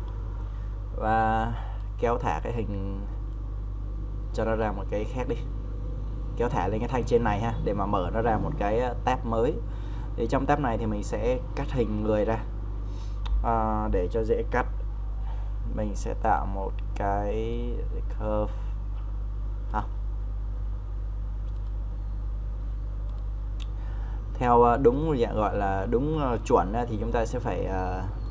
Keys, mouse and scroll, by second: 20.6 Delete.